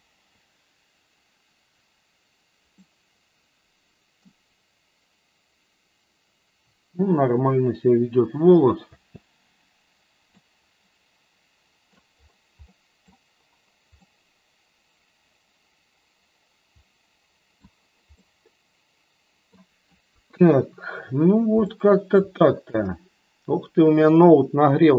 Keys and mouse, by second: 3.0-4.6 middle drag, 9.2 space, 10.3-11.9 middle drag, 12.6 middle drag, 13.9-17.5 middle drag, 18.2-19.4 middle drag, 20.0 KP_1, 21.6-22.0 shift+middle drag.